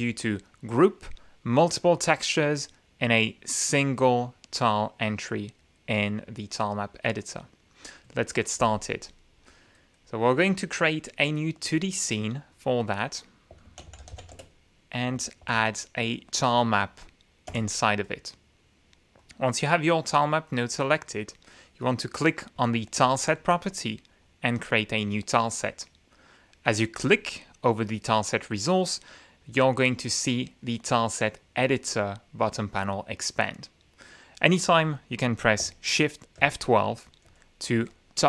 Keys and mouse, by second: 9.7 click, 10.6 click, 11.6 click, 12.5 click, 13.4-14.7 typing, 15.4 ctrl+a, 17.5 Return, 19.2 click, 21.0 click, 23.0 click, 24.6 click, 26.9 click, 29.5 click, 30.2-31.9 drag, 36.4 shift+F12, 37.2 shift+F12.